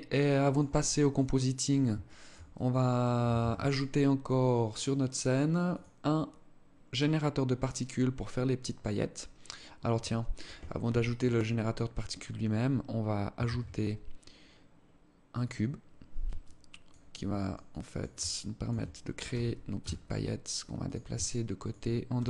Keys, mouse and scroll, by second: 0.3 alt+click, 0.9 alt+click, 1.6 alt+shift+click, 2.1 alt+click, 2.9 ctrl+s, 4.5-5.1 scroll down 11, 5.3 click, 10.4 KP_3, 12.9 shift+a, 15.9 alt+click, 16.7 alt+click, 17.2 alt+click, 17.7 alt+shift+click, 18.8 g, 20.7 alt+shift+click, 21.7 g.